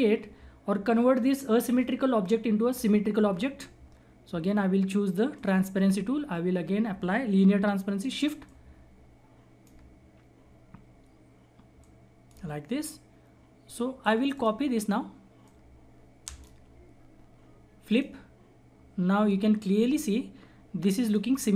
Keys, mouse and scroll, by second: 5.3 click, 5.3 click, 5.9-7.7 scroll up 1, 8.4 shift+Num_Lock, 8.4 scroll up 1, 8.6-11.0 shift+drag, 11.0-11.7 scroll up 1, 11.7 shift+click, 12.7-13.0 scroll down 1, 14.3 click, 14.7-15.4 scroll down 1, 15.4 click, 16.2 shift+right click, 17.8-21.5 drag.